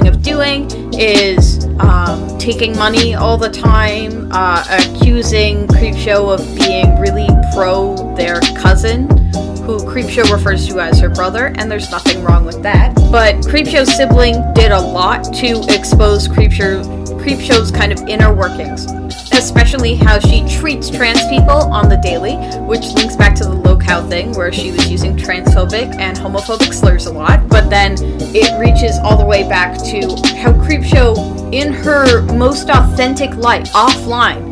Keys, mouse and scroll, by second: 0.9 space, 6.1 space, 13.0 [, 13.8 [, 16.3 [.